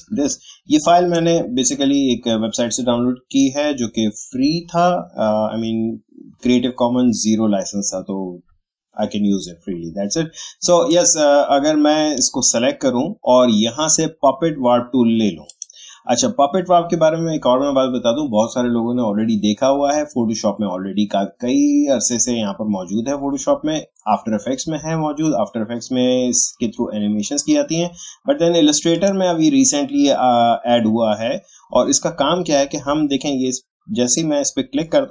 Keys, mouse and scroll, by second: 0.1 space, 0.3 click, 0.6 space, 10.9-14.8 drag, 15.5 click, 28.9 click.